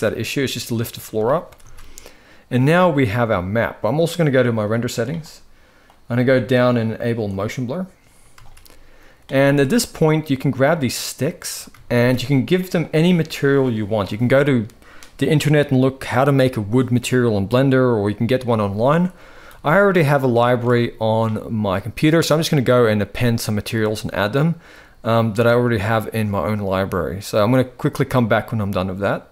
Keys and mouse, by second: 1.1 ctrl+s, 1.4 ctrl+s, 2.5 shift+middle click, 8.1 ctrl+s, 9.1 z, 10.4 click, 11.5 ctrl+s, 11.6 ctrl+s, 19.2 ctrl+s, 20.0 shift+middle click, 22.1-23.2 drag.